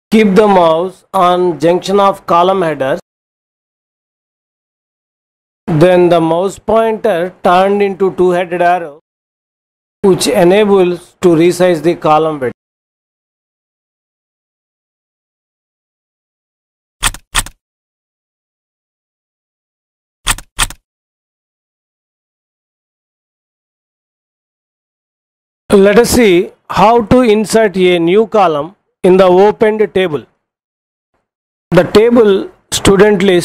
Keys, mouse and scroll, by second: 13.1 click, 17.2 click, 17.5 click, 20.2 click, 20.5 click.